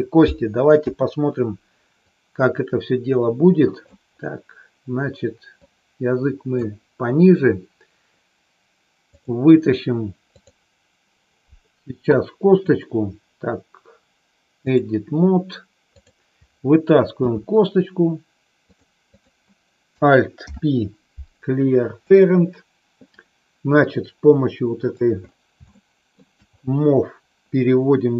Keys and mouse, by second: 0.7 KP_3, 2.2-3.9 drag, 5.5-6.5 drag, 9.0 click, 10.3 click, 12.5-14.8 drag, 17.2 e, 19.2 click, 20.4 alt+p, 23.8-24.9 drag, 25.7 shift+middle click.